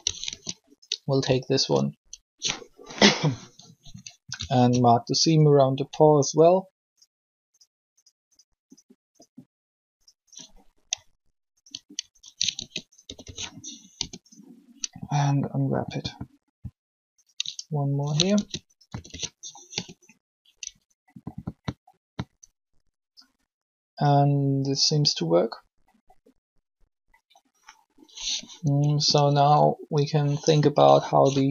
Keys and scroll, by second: 0.1 ctrl+shift+e, 12.5 ctrl+shift+e, 13.0-13.9 typing, 18.3 ctrl+shift+e, 18.8-19.7 typing, 28.6 r.